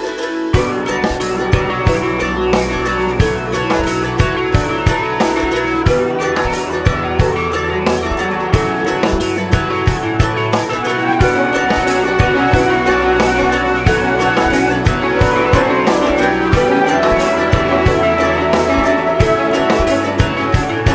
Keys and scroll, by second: 0.7 ctrl+r, 0.9 Escape, 1.5 ctrl+e, 2.6 ctrl+e, 3.8 ctrl+e, 6.2 ctrl+e, 8.9 ctrl+r, 9.6 Escape, 10.6 ctrl+z, 11.2 ctrl+r, 11.5 Escape, 11.9 ctrl+r, 12.1 Escape, 12.5 ctrl+r, 12.7 Escape, 13.7 ctrl+r, 14.9 ctrl+r, 15.2 Escape, 16.4 ctrl+e, 17.3 ctrl+e, 18.8 ctrl+e, 19.7 ctrl+e, 20.6 ctrl+e.